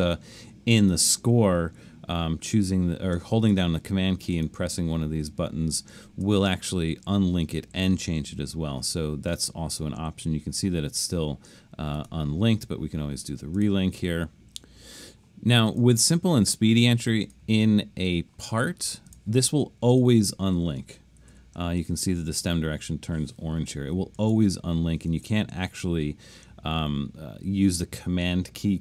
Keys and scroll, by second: 21.3 |, 24.2 super+z, 25.1 super+z.